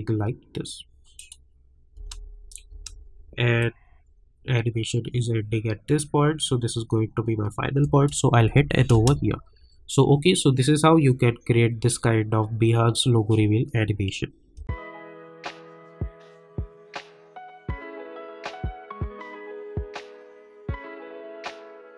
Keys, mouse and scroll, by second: 1.1 click, 1.9 space, 3.6-8.4 drag, 8.4 n, 8.9 space, 14.5 space.